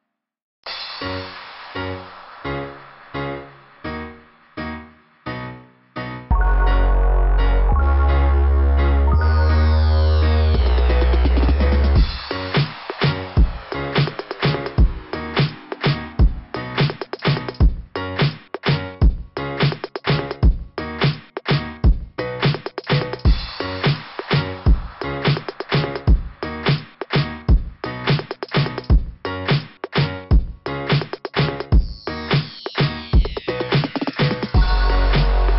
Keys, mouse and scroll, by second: 0.6 click, 1.2 click, 2.6 click, 2.6 scroll down 3, 3.7 click, 4.7 click, 5.9 click, 9.1 scroll down 1, 9.2 scroll up 1, 9.3 scroll down 1, 9.4 scroll up 1, 9.7 scroll down 1, 10.0 scroll down 1, 10.6 scroll down 1, 10.6 scroll up 1, 10.9 scroll down 1, 11.0 scroll up 1, 11.3 scroll down 1, 11.8 click, 14.3 scroll down 2, 15.9 scroll down 1, 16.4 scroll up 1, 16.6 scroll down 2, 16.6 scroll up 1, 16.9 scroll down 2, 18.2 scroll up 2, 18.3 click, 20.3 click, 21.4 click, 25.2 scroll down 1, 27.1 click, 27.8 9, 29.0 Return, 29.0 typing, 31.8 click, 34.5 click, 34.7 click.